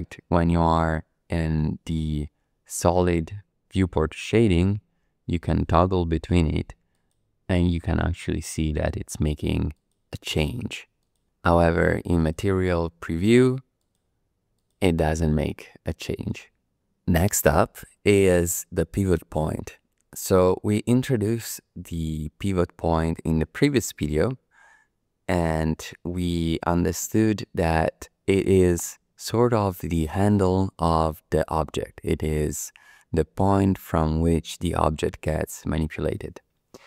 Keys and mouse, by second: 5.4 click, 6.2 click, 7.5 click, 8.1 click, 9.7 click, 10.3 click, 11.0 click, 12.2 click, 13.8 click, 14.5 click, 15.1 click, 16.1 click.